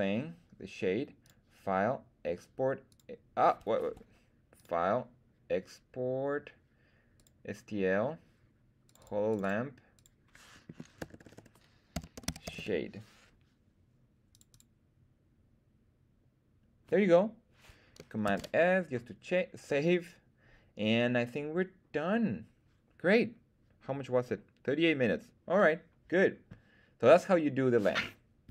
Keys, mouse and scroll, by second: 1.2-3.0 drag, 4.5-7.3 drag, 18.2 super+s.